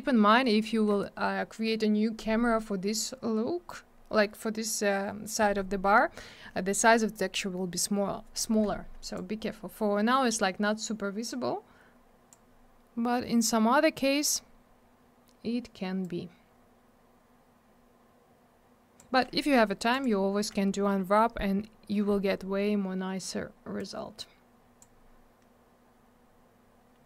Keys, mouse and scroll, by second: 9.0 click, 9.1 click, 11.2 click, 14.5 scroll down 1, 19.9 click, 20.0 click, 23.8 click.